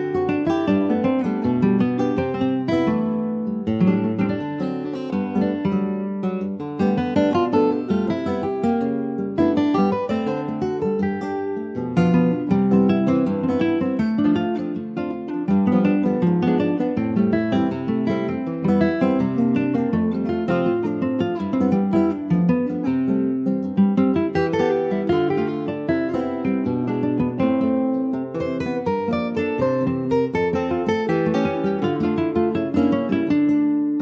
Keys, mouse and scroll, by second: 0.2 l, 1.6 click, 2.9 click, 4.1-5.4 shift+drag, 5.4 alt+z, 5.7-6.1 scroll up 2, 6.1-7.2 shift+middle drag, 7.2 alt+z, 8.6 s, 11.3 alt+z, 11.5 click, 11.8 scroll down 2, 12.0 middle click, 12.3 Tab, 12.5 click, 12.8 middle click, 13.1 ctrl+s, 13.5-14.8 middle drag, 14.8 ctrl+s, 15.2 click, 15.5 middle click, 15.9 scroll up 1, 16.1 shift+middle click, 16.8 click, 17.1-17.5 scroll down 3, 17.5 middle click, 18.2 ctrl+s, 18.5 shift+click, 19.0 middle click, 19.3 click, 19.6-22.2 shift+middle drag, 22.2 ctrl+s, 22.3 click, 22.8 shift+middle click, 23.0 shift+scroll up 3, 23.4 middle click, 23.7 scroll up 1, 23.9 click, 24.5 click, 24.8-25.1 scroll up 3, 25.1 shift+middle click, 25.5 scroll up 2, 25.6 Tab, 25.9 middle click, 26.1-26.9 scroll up 4, 26.4 shift+middle click, 26.9-29.9 middle drag, 29.9 ctrl+r, 31.1 scroll down 3, 31.4-33.2 middle drag, 33.2 ctrl+r, 33.8-34.0 right drag.